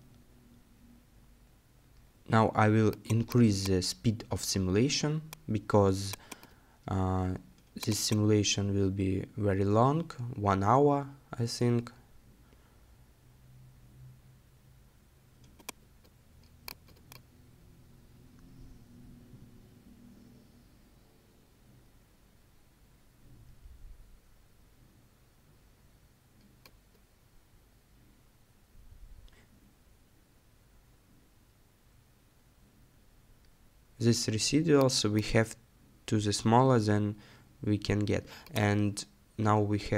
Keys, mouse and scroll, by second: 38.6-39.1 scroll down 2, 39.1 scroll up 2, 39.8 middle click.